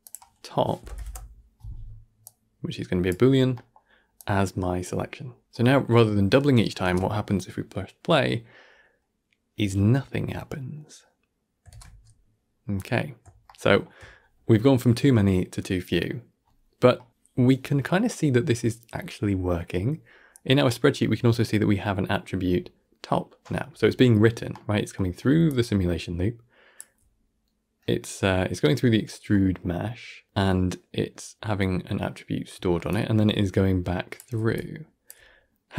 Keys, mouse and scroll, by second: 3.4-4.0 middle drag, 4.0-5.9 drag, 7.5 shift+space, 11.6 shift+space, 12.5-13.2 scroll up 3, 13.3-19.3 shift+middle drag, 20.3-22.4 scroll up 4, 22.4-23.5 scroll up 1, 23.5-24.4 scroll down 2, 24.4 middle click, 25.2 d, 26.3-29.2 drag, 29.2-35.5 middle drag, 35.5 d.